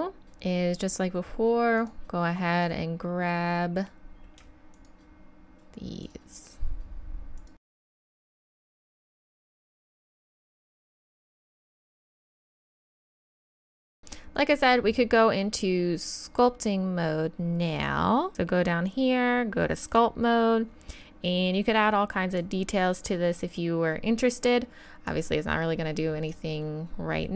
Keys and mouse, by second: 11.5 KP_3, 12.7 KP_1, 13.0 z, 13.1 Tab, 13.1 z, 22.4-26.7 drag, 26.7 middle drag.